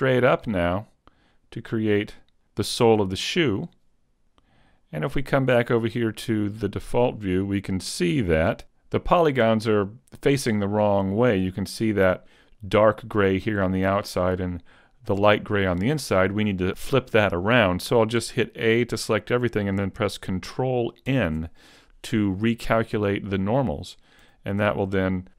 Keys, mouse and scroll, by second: 0.7 click, 4.8 click, 6.8-7.5 scroll down 2, 7.5 shift+middle click, 8.1 a, 8.4 middle click, 18.2 a, 21.1 ctrl+n, 24.2 a.